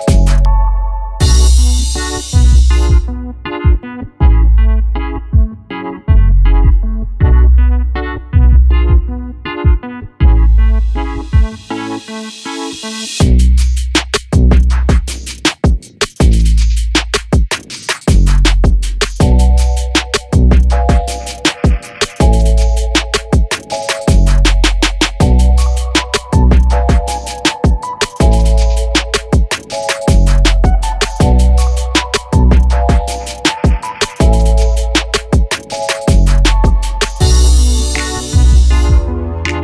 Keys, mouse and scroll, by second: 2.1 click, 4.5 click, 5.5-9.2 drag, 10.0-16.8 drag, 21.4 ctrl+g, 23.6 click, 37.5 F9, 38.8-39.6 drag.